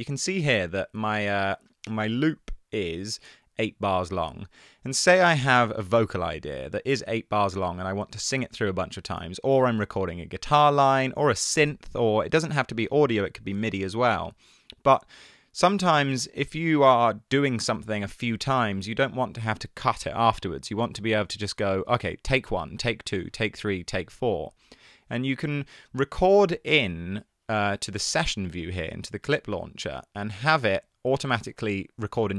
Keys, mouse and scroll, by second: 3.7 Tab, 30.7 Tab.